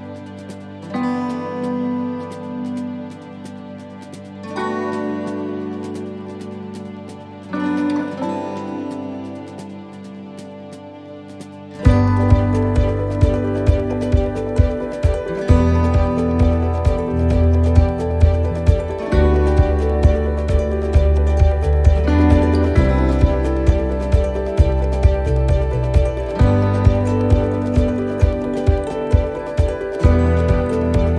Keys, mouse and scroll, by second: 1.0 click, 4.6-5.0 scroll up 3, 5.0 middle click, 7.2-7.9 scroll down 4, 7.9 middle click, 8.3-8.7 scroll up 2, 8.7 middle click, 9.8 scroll down 1, 10.2 middle click, 10.7 shift+middle click, 11.2 middle click, 11.7 shift+middle click, 12.2 shift+middle click, 12.8-13.2 scroll down 3, 13.2 middle click, 13.6 shift+middle click, 14.6 middle click, 16.0 shift+middle click, 17.3 scroll down 4, 17.7 shift+middle click, 18.8 middle click, 19.3-19.6 scroll down 1, 19.7 shift+middle click, 20.3-21.2 scroll up 2, 20.7 middle click, 21.7 right click, 23.4 l, 24.6 l, 28.2 shift+l, 28.4 shift+d, 29.8 s.